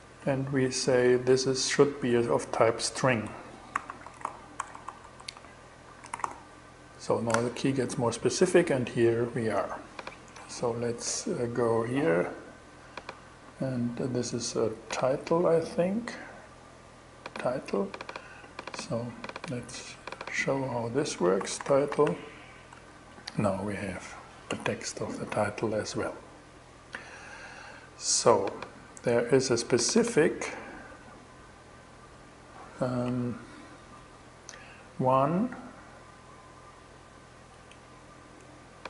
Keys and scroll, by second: 2.8-6.2 typing, 20.6-22.2 typing, 33.0 shift+super+e.